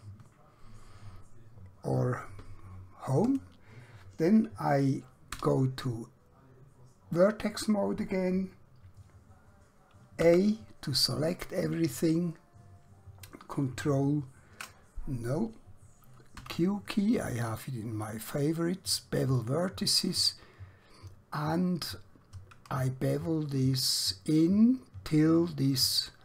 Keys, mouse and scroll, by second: 5.3 1, 10.2 a, 13.5 ctrl+Num_Lock, 16.5 q, 19.3 click, 22.9 shift+Num_Lock.